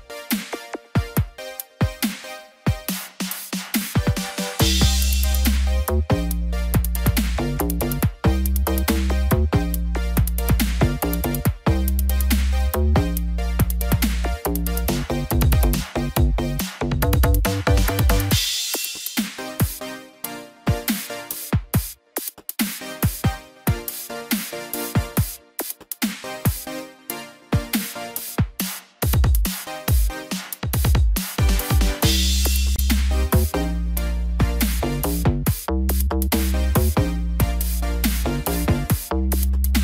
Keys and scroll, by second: 1.6 ctrl+0, 17.4 ctrl+=, 22.9 ctrl+=, 32.5 ctrl+=, 36.4 ctrl+z.